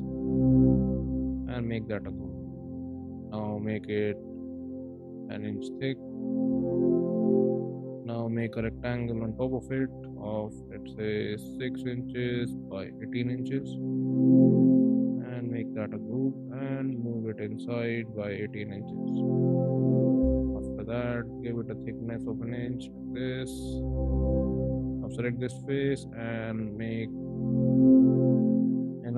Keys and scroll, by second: 1.8 ctrl+g, 3.0 p, 4.4 1, 5.0 Return, 5.4 space, 8.2 r, 11.4-13.7 typing, 13.4 Return, 15.6 ctrl+g, 16.7 m, 17.8 1, 18.2 8, 18.6 Return, 19.0 space, 20.4 p, 21.9 1, 22.3 Return, 22.7 space, 25.3 p.